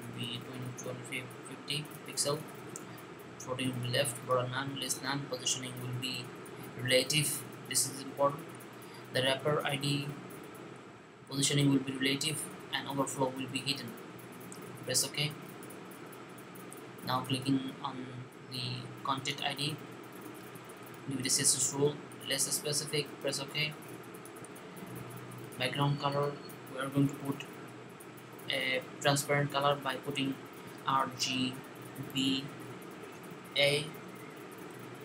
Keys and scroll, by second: 30.4-33.3 typing, 34.4 typing.